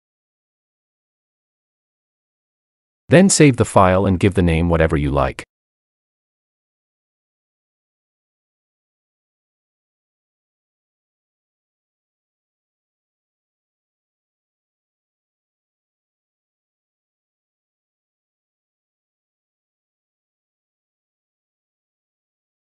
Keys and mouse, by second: 1.3-4.5 drag.